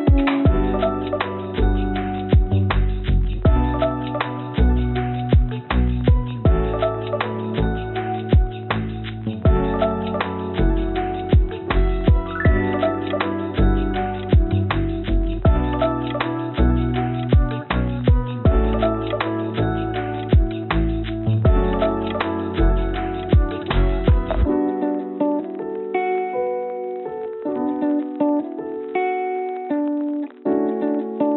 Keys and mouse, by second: 4.1 ctrl+s, 27.2 click, 28.1 click.